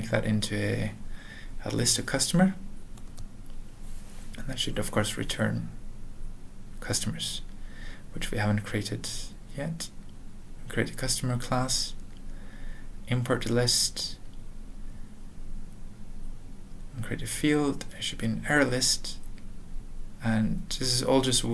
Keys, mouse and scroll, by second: 0.0-1.3 typing, 2.1 ctrl+n, 3.3 alt+BackSpace, 4.2-4.5 typing, 5.0 ctrl+a, 5.4 ctrl+s, 5.6 ctrl+e, 5.9 alt+b, 6.2 alt+f, 6.5 typing, 6.9 ctrl+a, 7.3 ctrl+s, 7.4 ctrl+e, 7.8 ctrl+p, 8.2 alt+b, 8.5 alt+Return, 8.7-9.4 typing, 10.0 alt+Return, 11.7 alt+b, 12.2 alt+Return, 12.4-13.1 typing, 14.0 ctrl+n, 14.6 ctrl+e, 15.4-16.3 typing, 17.0 alt+., 17.3 alt+f, 17.8 space, 19.4 typing, 20.5 Return, 21.3 ctrl+a.